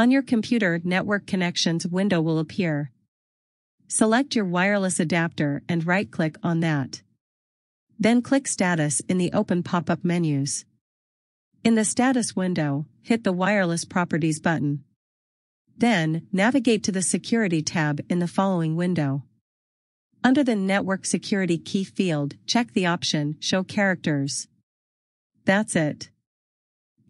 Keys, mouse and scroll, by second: 10.9 click, 19.6 click, 19.8 click.